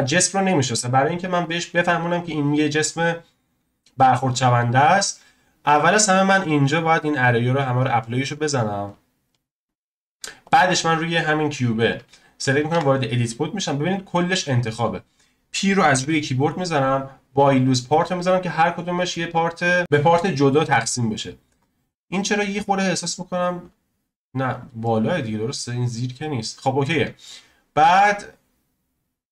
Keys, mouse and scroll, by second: 1.1 scroll up 2, 1.5-3.8 middle drag, 3.8-4.6 drag, 4.6-5.2 scroll down 1, 6.1-9.6 drag, 9.6-10.4 middle drag, 10.4 click, 10.9 scroll up 1, 12.7 Tab, 15.9 p, 19.1-21.1 middle drag, 21.5 Tab, 22.6 click, 24.8-27.5 middle drag, 27.5-29.3 scroll down 1.